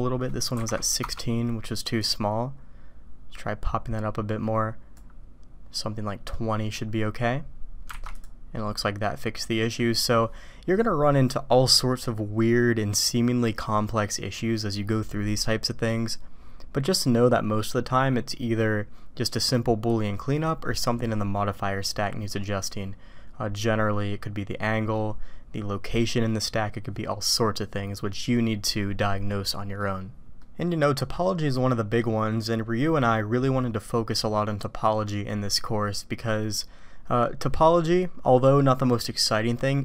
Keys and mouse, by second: 0.0-1.8 drag, 1.9-5.3 drag, 6.3 click, 8.8-9.8 drag, 30.4-32.0 drag.